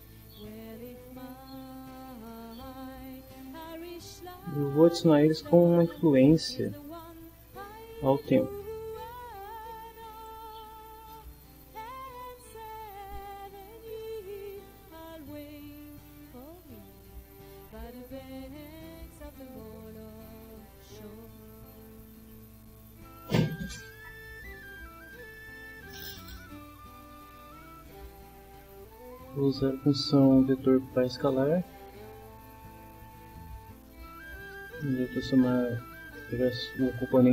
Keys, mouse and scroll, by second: 2.3 middle click, 4.6-5.8 drag, 6.5-8.0 drag, 9.1 click, 10.2 click, 11.4-14.4 drag, 15.0-16.3 drag, 20.0 right click, 31.2 click, 33.3-34.8 drag, 35.7-37.3 drag.